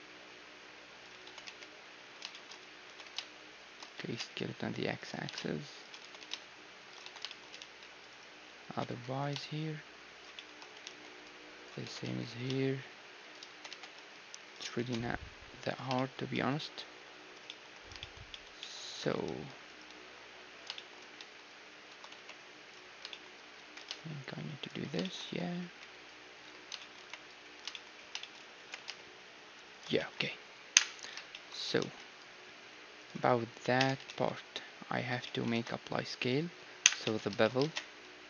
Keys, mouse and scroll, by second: 1.2 s, 2.3-4.2 middle drag, 2.9 s, 3.7 g, 5.2 g, 6.0 s, 7.0 a, 7.2-13.2 middle drag, 7.6 ctrl+r, 8.7 s, 10.8 ctrl+r, 11.8 s, 13.5 g, 14.8 s, 15.9-20.5 middle drag, 19.2 ctrl+r, 19.7-21.7 right drag, 19.9 a, 20.7-22.7 middle drag, 21.2 a, 21.9 a, 22.1 b, 23.1-33.2 middle drag, 23.6 g, 25.2 a, 25.6 b, 26.9 b, 28.6 g, 29.9 a, 30.7 KP_1, 31.7 ctrl+r, 33.7 Tab, 34.0 ctrl+a, 35.0 z, 35.2-37.0 middle drag, 35.5 ctrl+a, 36.8 KP_1, 37.0 Tab, 37.6 ctrl+Tab, 37.6-38.2 middle drag.